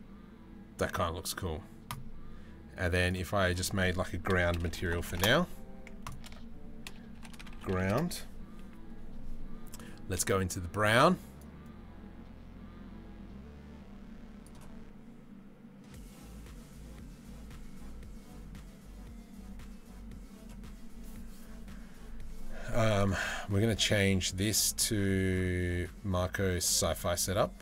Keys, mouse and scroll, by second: 3.0-4.0 middle drag, 4.2 middle click, 5.7-7.6 middle drag, 9.3 middle click, 22.5 middle click, 23.9-26.3 middle drag.